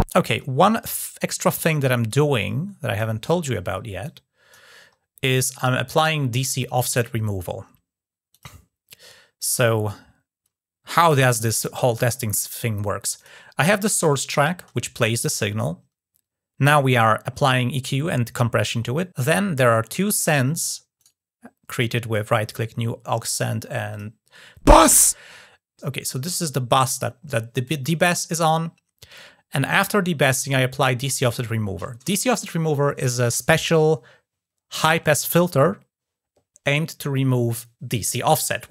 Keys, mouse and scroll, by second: 0.6 click, 1.0 scroll up 2, 1.9 click, 3.8-4.4 drag, 4.8 scroll down 1, 8.1 click, 13.0 click, 20.8 right click, 23.7 click, 26.0 click.